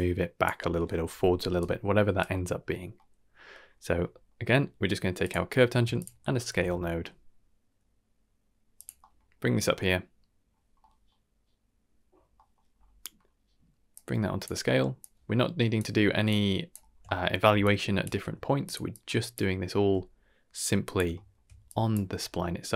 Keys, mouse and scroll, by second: 0.0-0.5 typing, 1.5 right click, 2.1 d, 2.2 d, 2.6-2.9 scroll down 2, 2.9 middle click, 3.7 middle click, 3.9 scroll down 2, 4.1 middle click, 4.6 middle click, 5.2 click, 5.9 shift+click, 6.2 shift+middle click, 6.4 shift+d, 8.9 middle click, 9.3-9.7 scroll up 3, 9.7 middle click, 10.6 scroll down 2, 10.8 middle click, 12.3 middle click, 12.7-13.8 scroll up 2, 13.9-14.4 drag, 15.0-15.7 drag, 16.2-16.7 drag, 16.8 scroll down 2, 17.0 shift+middle click, 17.6-18.0 shift+drag, 18.3 g, 18.9-19.3 drag, 19.7 g, 21.1 shift+middle click, 21.6-21.9 drag, 22.1 g.